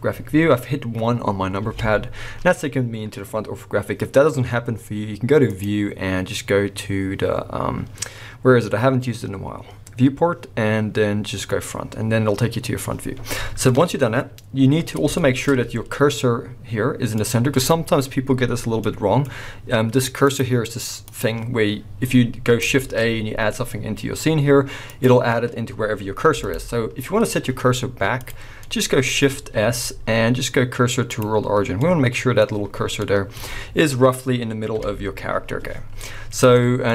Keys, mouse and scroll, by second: 1.6 KP_1, 2.5-5.4 scroll up 2, 5.4-15.1 drag, 14.8-15.1 scroll down 2, 15.1-20.2 shift+middle drag, 15.4-17.2 scroll up 2, 20.2 click, 22.8 shift+a, 26.3 x, 28.2 click, 28.6-36.9 middle drag, 29.5 shift+s, 34.7 KP_1, 35.4-36.6 scroll down 2.